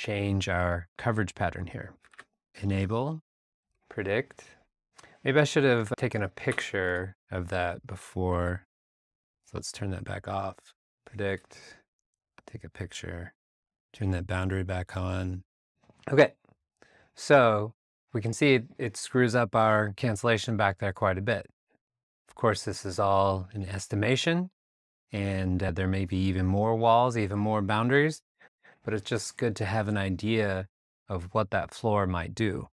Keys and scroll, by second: 2.1 shift+super+r, 6.5 BackSpace, 8.4 shift+super+r.